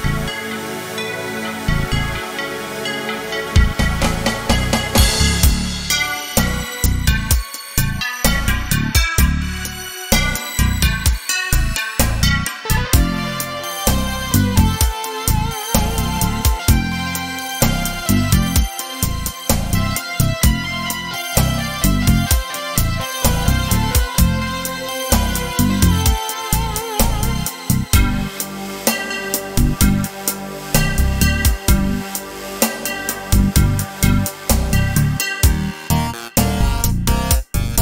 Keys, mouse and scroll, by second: 2.1-7.3 middle drag, 7.3-9.6 drag, 9.6-13.0 middle drag, 13.0 click, 13.6-14.7 middle drag, 14.7-18.8 drag, 20.2-33.5 drag, 33.5 right click, 34.8-37.8 drag.